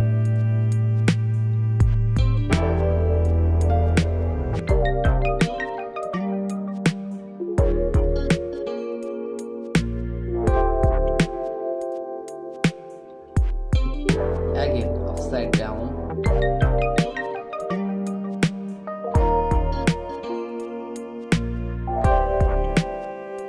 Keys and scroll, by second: 0.7 space, 2.0 space, 9.3 space, 9.8 space, 10.1 [, 10.3 ], 11.9 [, 13.5 space, 14.3 v, 22.2 [, 22.7 ].